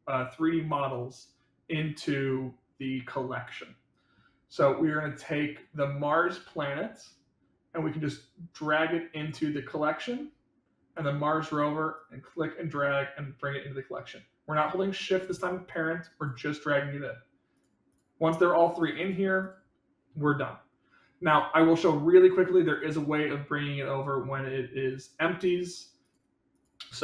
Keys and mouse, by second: 7.0-9.3 drag, 10.9 click, 11.9-16.2 drag, 17.5 click, 17.8 click, 18.2 click, 22.9-27.0 drag.